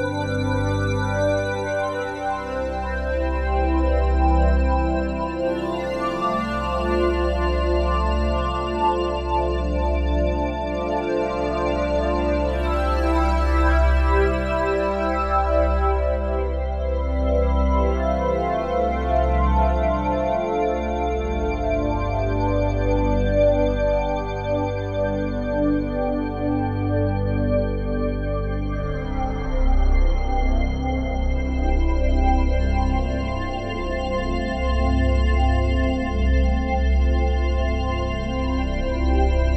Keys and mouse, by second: 0.4-1.7 drag, 2.5-8.2 drag, 8.9 click, 10.8 alt+shift+click, 11.2 alt+click, 12.0-15.6 alt+shift+drag, 15.6 s, 17.5 click, 19.6 click, 20.3 click, 21.4 s, 22.6 click, 24.3 click, 25.2 click, 26.5 s, 28.0-30.7 drag, 28.0 typing, 30.5-31.2 typing, 32.5-36.0 drag, 36.0-36.4 typing, 37.7 click, 38.3-38.7 typing.